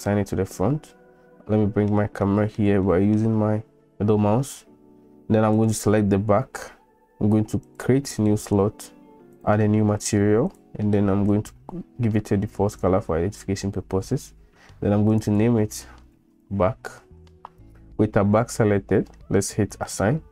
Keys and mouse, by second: 0.1-1.9 middle drag, 2.2 middle click, 2.8 shift+middle click, 7.6 click, 9.4 drag, 10.5 click, 15.1 click, 15.3-18.1 drag, 19.9 click.